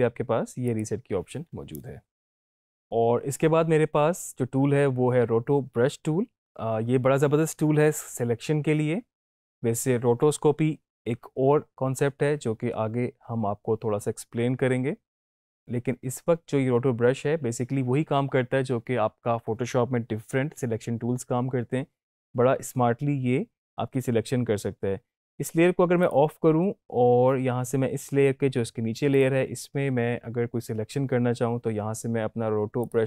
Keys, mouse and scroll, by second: 0.7 click, 26.0 click, 29.1 click, 32.8 click.